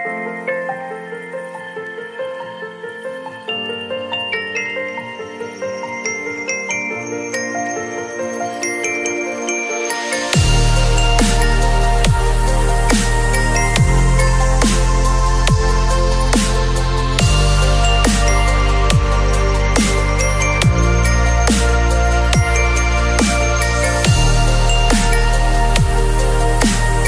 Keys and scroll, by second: 3.9 b, 5.1 [, 9.4 v.